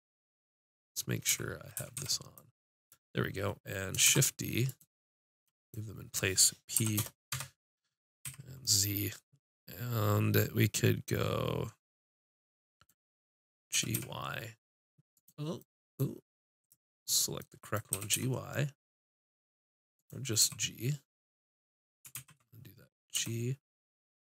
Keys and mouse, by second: 1.3 z, 1.8 a, 2.9 click, 4.1 shift+d, 6.8 p, 7.3 Tab, 8.2 z, 13.7 g, 15.2 click, 16.6 click, 16.6 right click, 17.1 right click, 17.9 g, 20.4 h, 21.1 click, 22.2 ctrl+z, 23.1 g.